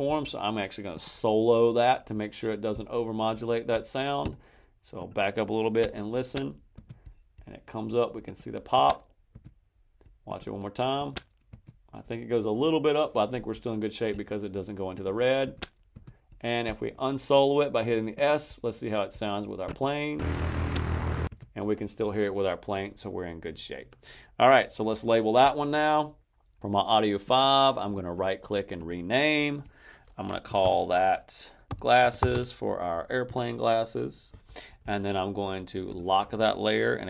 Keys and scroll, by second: 5.7 space, 8.6 space, 10.8 space, 15.3 space, 20.1 space, 21.2 space, 30.5-32.7 typing, 33.2 Return.